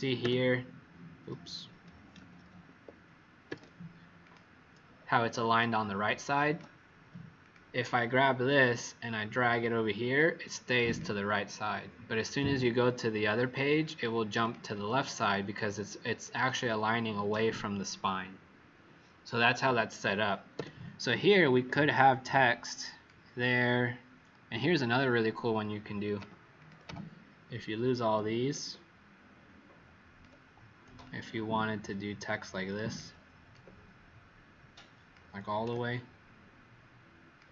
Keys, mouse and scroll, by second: 2.1 ctrl+z, 2.6 Escape, 3.4 w, 4.2 click, 5.6 click, 7.3 click, 10.8 click, 12.5 alt+click, 14.3 click, 20.5 w, 21.4 click, 26.1 Delete, 26.5 click, 26.8 Delete, 28.4 alt+click, 31.1 alt+shift+click, 33.4 alt+click.